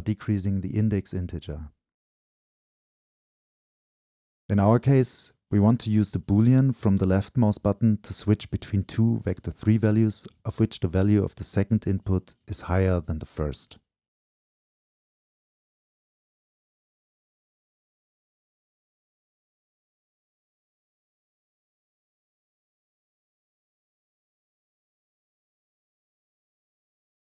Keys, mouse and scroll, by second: 2.6 click, 5.1-8.7 drag, 10.1-11.4 scroll, 12.5 click, 14.4-16.1 shift+drag, 16.6-24.2 drag, 24.9-27.2 drag.